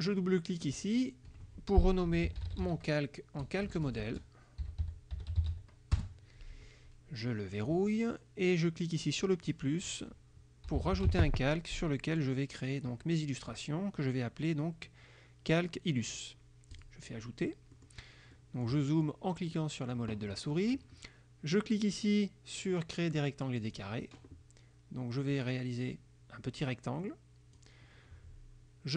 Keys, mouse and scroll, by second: 0.8 click, 1.9-6.1 typing, 7.6 click, 9.5 click, 10.5-11.8 typing, 16.8 click, 17.8 click, 18.4 click, 19.6 click, 23.7 click, 25.3-27.8 drag.